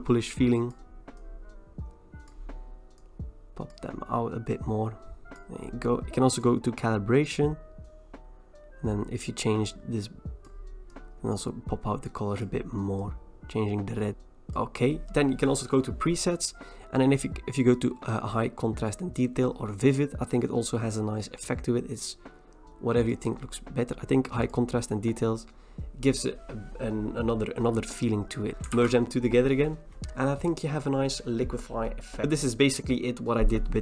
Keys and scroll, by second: 28.8 ctrl+e.